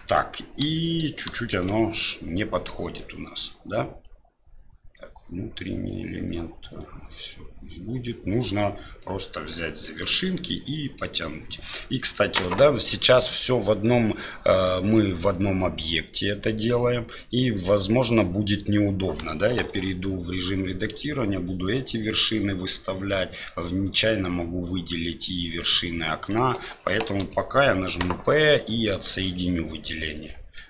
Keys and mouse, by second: 1.5 shift+z, 1.7-8.5 middle drag, 9.7 shift+middle click, 10.2 middle click, 12.3 middle click, 13.9 middle click, 18.3 middle click, 19.7 1, 23.1 middle click, 26.3 middle click, 27.2 p, 29.9 middle click.